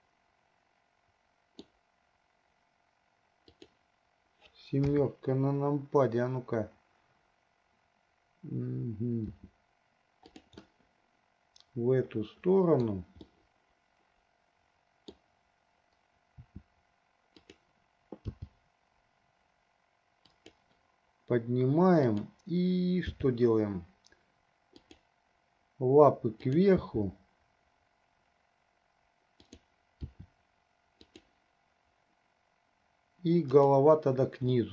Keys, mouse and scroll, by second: 3.6 click, 5.0 KP_7, 9.3 r, 10.8-13.1 middle drag, 13.6-15.6 middle drag, 16.6 r, 18.5 g, 22.1 click, 23.3 g, 27.0 g, 30.2 r, 33.6 click.